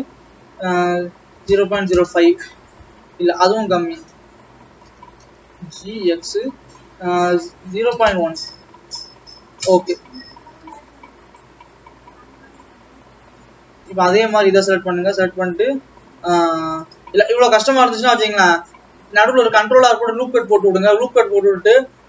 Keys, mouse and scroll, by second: 3.6 Escape, 5.0 ctrl+z, 5.8 g, 10.3 Return, 10.6-11.3 scroll up 4, 11.9 click, 14.3 click, 15.7-17.5 scroll down 1, 17.5 scroll down 3, 17.7 alt+a, 18.2 ctrl+r, 20.8 click.